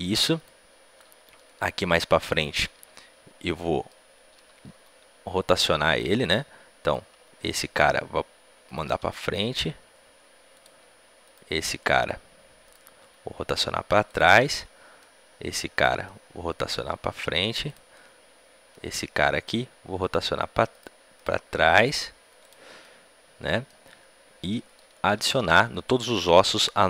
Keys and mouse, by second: 3.4 click, 3.5-6.8 middle drag, 4.6 g, 6.8-9.1 drag, 6.8-14.3 right drag, 7.0 g, 9.1 r, 11.2-12.6 drag, 12.9 r, 14.3-15.9 drag, 15.7-17.4 right drag, 17.9-19.9 drag, 19.9-23.0 right drag, 20.2 r, 21.4 r, 22.6-24.7 drag, 25.1 a, 25.3 a.